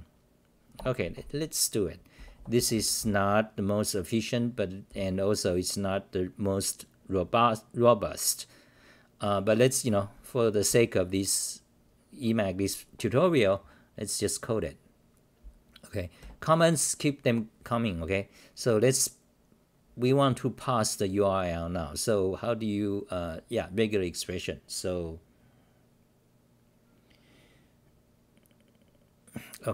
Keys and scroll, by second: 0.7 Return, 1.9-3.5 typing, 4.9 t, 10.7 k.